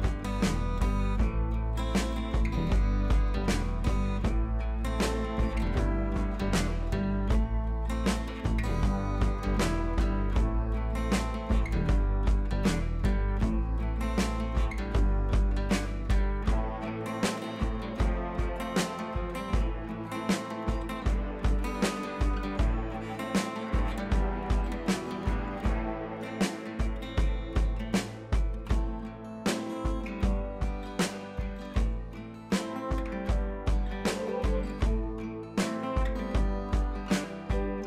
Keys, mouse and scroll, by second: 0.4 click, 1.7 ctrl+scroll up 1, 1.8 ctrl+v, 2.2 ctrl+scroll up 1, 2.7 ctrl+t, 3.6-7.7 alt+drag, 8.3 click, 11.9 ctrl+c, 12.7 click, 13.7 ctrl+v, 15.1 alt+click, 15.7-17.0 drag, 23.8 ctrl+c, 24.2 click, 24.8 ctrl+c, 26.1 ctrl+c, 27.0 click, 28.5 ctrl+v, 29.6 ctrl+z, 30.5 click, 32.2 right click, 33.0 click, 33.5 ctrl+d, 34.2 click, 34.7 right click, 35.8 click, 36.4 ctrl+a, 37.2 ctrl+c.